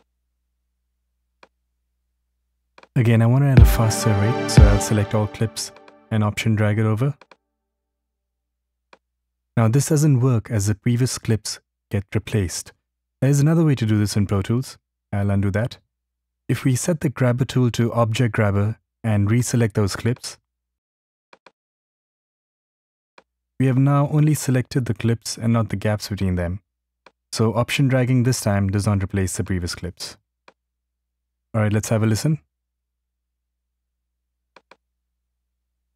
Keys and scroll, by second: 3.1 Return, 14.7 super+z, 35.8 Return.